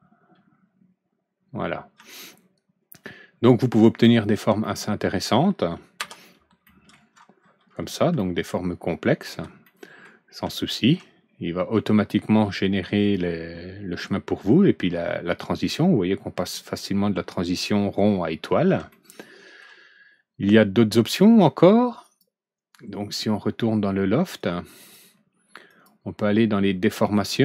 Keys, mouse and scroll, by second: 1.3 scroll down 1, 1.9 alt+Right, 2.0-3.6 middle drag, 4.0 middle click, 4.6 middle click, 6.0 F4, 6.6 middle click, 8.0 alt+Right, 8.1-9.2 middle drag, 9.6 middle click, 10.4 alt+Right, 10.4 middle click, 15.4 scroll up 1, 18.3 scroll down 1, 18.7 alt+Right, 18.8 middle click, 22.0 click, 24.3-24.8 drag, 25.6 click, 27.1 click.